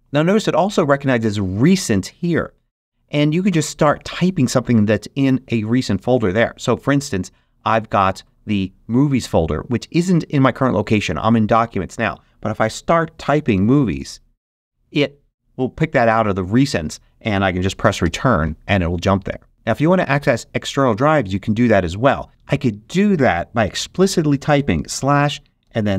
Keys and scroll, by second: 12.5-14.3 typing, 17.9 Return, 24.4-25.9 typing.